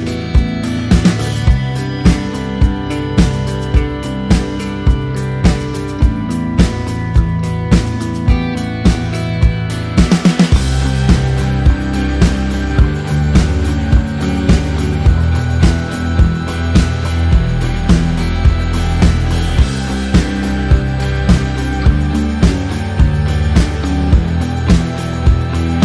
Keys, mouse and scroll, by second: 0.5 click, 2.6 ctrl+s, 5.9 click.